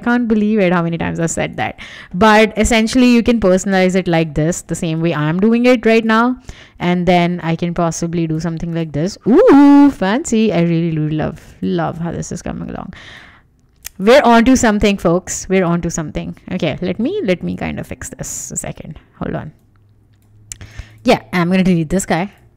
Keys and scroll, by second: 4.9 BackSpace, 14.0 super+z, 21.5 BackSpace.